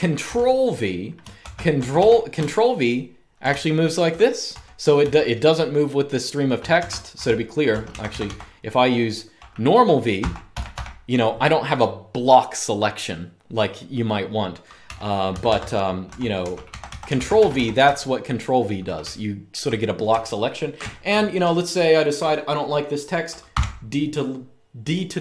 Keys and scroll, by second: 1.1 typing, 2.2-5.2 typing, 6.4-8.0 typing, 9.7-10.7 typing, 14.6-20.8 typing, 15.1 Escape, 15.3 Escape, 23.2 typing.